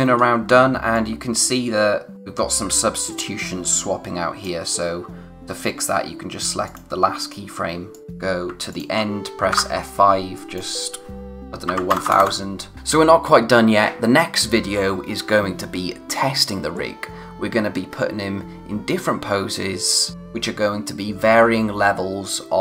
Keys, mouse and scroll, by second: 0.3 scroll up 1, 0.9 click, 2.1-2.6 scroll up 1, 3.4 click, 8.7 shift+click, 9.5 F6, 10.3 click.